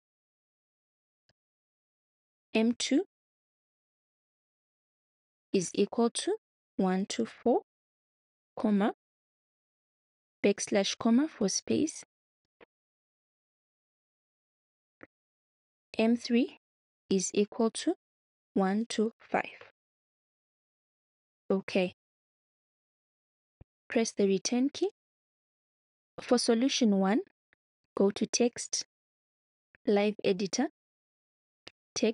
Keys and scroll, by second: 0.4 \, 1.3 ', 2.4 m, 3.8 shift+-, 4.1 2, 5.7-8.4 typing, 12.4 \, 12.9 ', 15.6-17.1 typing, 18.3-19.7 typing, 24.8 Return.